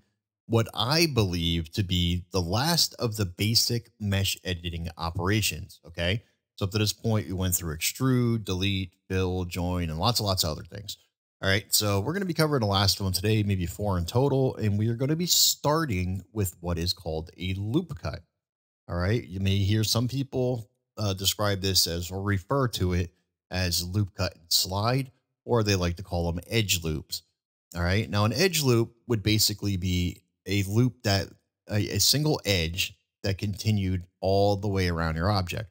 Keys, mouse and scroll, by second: 30.5 middle click.